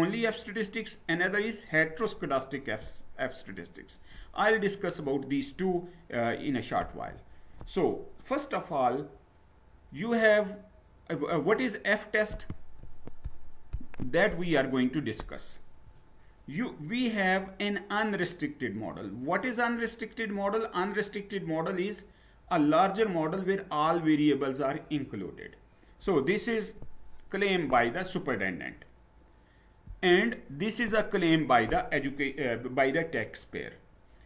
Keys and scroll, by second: 6.8 Down.